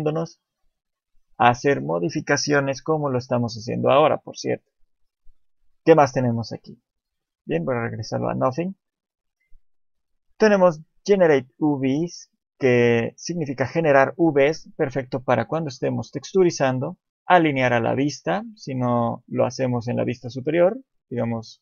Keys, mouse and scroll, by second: 6.9 click, 19.1-19.4 scroll down 2, 20.5 scroll down 1, 20.5 KP_3.